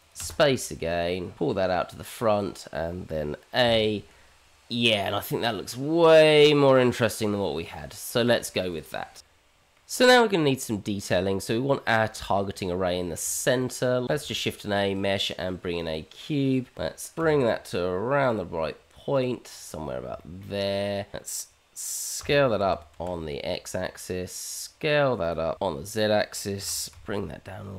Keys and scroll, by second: 4.6 h, 14.0 shift+z, 14.1 shift+a, 18.2 g, 22.2 s, 25.5 s, 26.6 g.